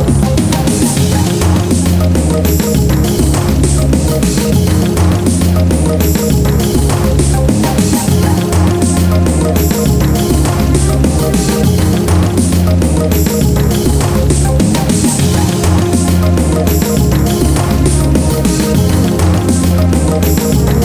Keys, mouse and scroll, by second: 0.2 click, 0.4 middle click, 0.8 middle click, 1.2 scroll up 1, 1.4 middle click, 2.2 Tab, 2.4 middle click, 3.1 scroll down 1, 3.3 middle click, 3.7 scroll up 1, 3.8 Tab, 5.6 middle click, 6.0 Tab, 6.3 middle click, 8.2 click, 8.6 middle click, 9.1 Tab, 9.9 click, 10.2 middle click, 11.1 scroll up 1, 11.2 middle click, 11.3 scroll down 1, 11.6 Tab, 12.2 middle click, 13.1 typing, 13.3 middle click, 15.4 1, 15.7 click, 16.0 middle click, 16.3-17.5 scroll up 1, 18.1 alt+right click, 18.9-19.2 scroll down 1, 19.3 middle click, 20.3-20.8 scroll up 1.